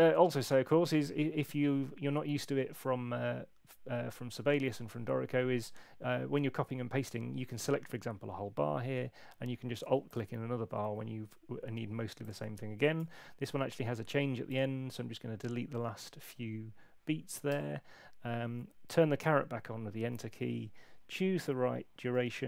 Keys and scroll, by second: 12.9 BackSpace, 17.5 Return.